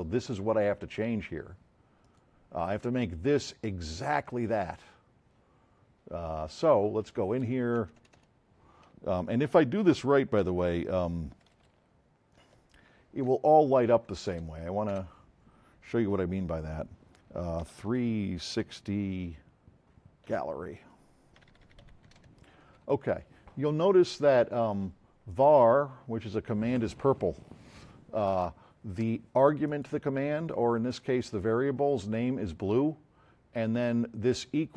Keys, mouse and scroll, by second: 6.4 click, 7.8 Right, 12.5 Left, 13.3 BackSpace, 14.9 BackSpace, 17.5-18.5 typing, 20.3-22.7 typing, 25.3 click, 29.7 click.